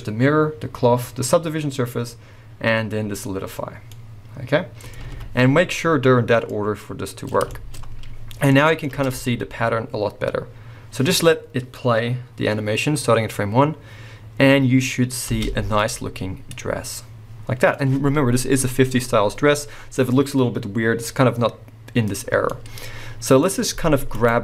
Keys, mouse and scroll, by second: 3.6 scroll down 2, 3.9-6.4 middle drag, 5.0 alt+a, 7.1-24.1 middle drag, 8.9 space, 17.8-21.7 scroll up 2, 23.4-24.1 scroll up 2, 24.1 click.